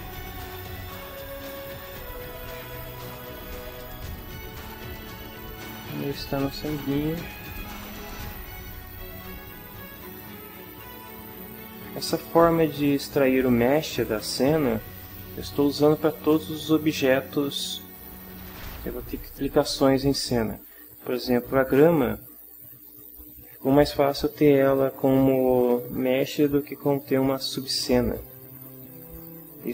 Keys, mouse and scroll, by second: 0.3-1.7 drag, 3.4-4.6 drag, 5.9 click, 6.8-8.4 drag, 9.1 click, 11.0 shift+middle click.